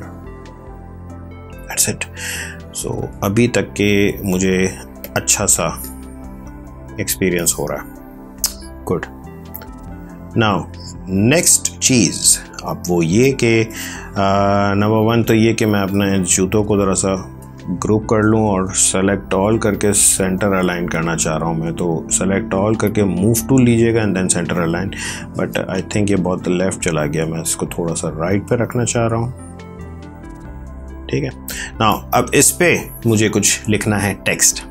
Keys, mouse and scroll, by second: 2.6 ctrl+1, 4.9 ctrl+click, 5.2 ctrl+space, 5.7 ctrl+click, 5.8 ctrl+space, 6.9 space, 7.2 click, 7.3 space, 9.4 click, 9.5 space, 11.4 ctrl+click, 16.8 ctrl+g, 18.1 ctrl+a, 19.8 click, 24.1 ctrl+d, 26.4 shift+Right, 28.8 shift+Down, 29.5 shift+Left, 30.0 shift+Down, 30.7 shift+Right.